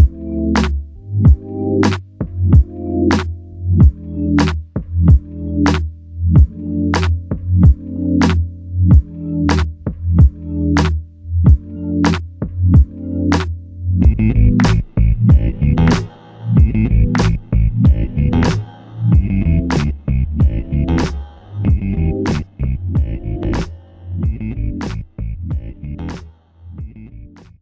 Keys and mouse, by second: 0.8 alt+click, 3.4 alt+click, 4.5 alt+click, 7.0 ctrl+click, 9.4 double click, 15.4 shift+click, 17.4 double click, 18.5 alt+click, 21.1 shift+click, 22.1 shift+click, 22.2 alt+click, 24.5 alt+shift+click, 25.2 alt+click.